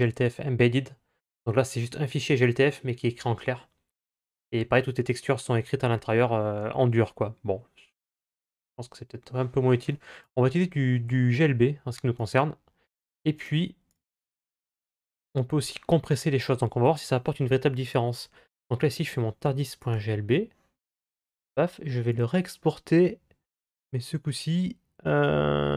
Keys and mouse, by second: 21.2-25.7 drag.